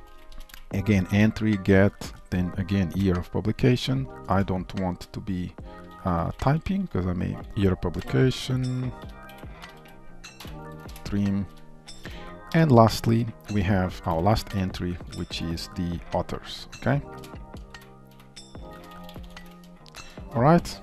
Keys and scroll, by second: 4.3 ctrl+Tab, 7.3 ctrl+q, 7.5 ctrl+v, 10.9 Return, 20.3 ctrl+s.